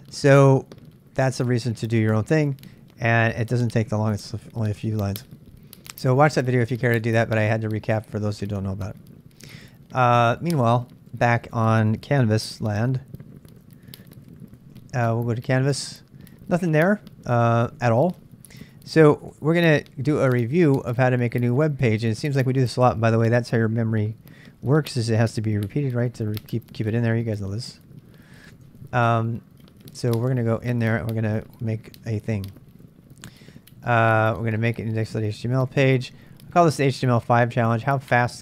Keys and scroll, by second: 12.3-15.0 typing, 17.7 super+Tab, 18.9-19.7 typing, 20.3 super+Tab, 26.8-28.4 typing, 28.5 Tab, 29.6-38.4 typing, 38.2 Return.